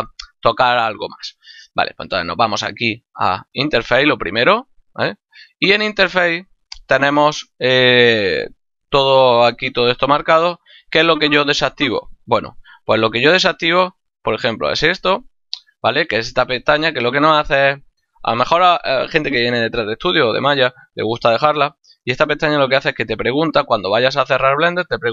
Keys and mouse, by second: 2.1 click, 5.5 click, 7.2 click, 15.7 click.